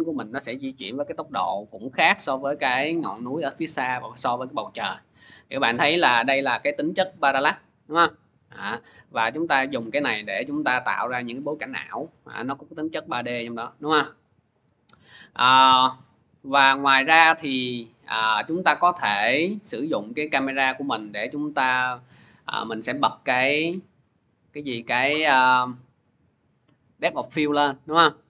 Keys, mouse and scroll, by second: 2.0 click, 9.5 click, 10.0 scroll, 11.0-11.3 scroll, 14.0 click, 15.1 scroll, 18.2 click, 21.4 click, 23.2 click, 24.1 click, 27.6 click.